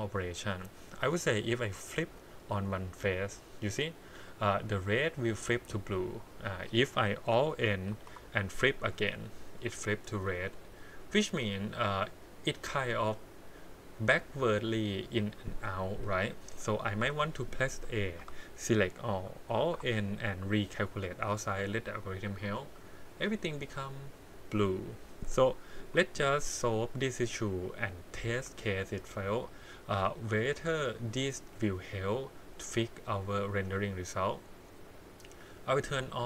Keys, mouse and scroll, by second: 2.8 click, 4.3 click, 5.4 click, 6.4 click, 7.9 alt+n, 9.5 click, 11.3-12.5 middle drag, 13.0-15.2 middle drag, 17.0 KP_1, 18.2 a, 19.6 alt+n, 22.5 click, 23.0-25.0 middle drag, 25.8 KP_1, 28.4 click, 29.9-31.4 middle drag, 34.8-36.2 drag.